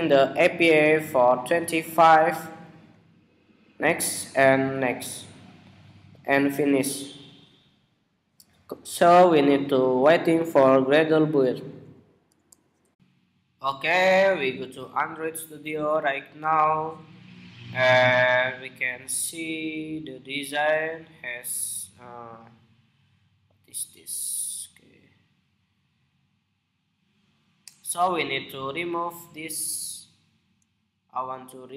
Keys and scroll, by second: 12.8 shift+super+2.